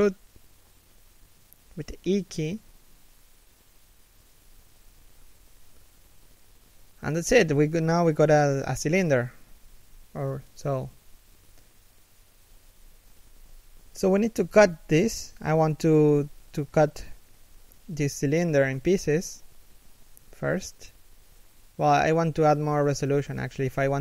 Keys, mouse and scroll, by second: 0.2-0.9 scroll up 1, 1.2 shift+middle click, 2.9 e, 6.0 a, 6.3 middle click, 7.8 3, 9.1 1, 14.9 middle click, 15.9 alt+right click, 17.1 alt+right click, 18.0 alt+right click, 18.7 alt+shift+middle click, 19.1 scroll up 1, 20.7 alt+shift+middle click.